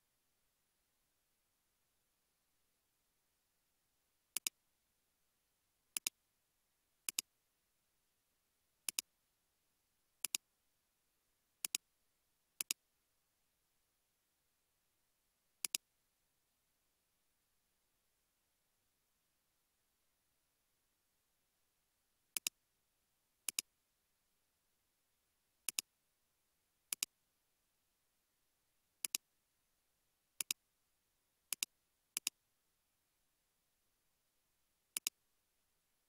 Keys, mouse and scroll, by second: 1.8 space, 2.2 space, 3.3 scroll down 1, 7.7 scroll down 1, 7.8 scroll up 1, 14.2 space, 14.6 space, 17.8 space, 19.6 space, 24.4-25.4 scroll up 1.